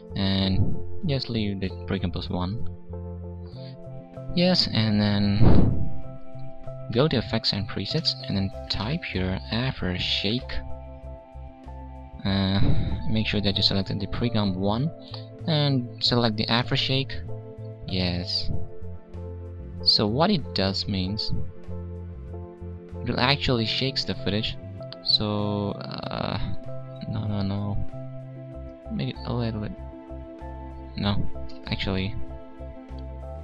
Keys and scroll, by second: 31.5 ctrl+shift+z.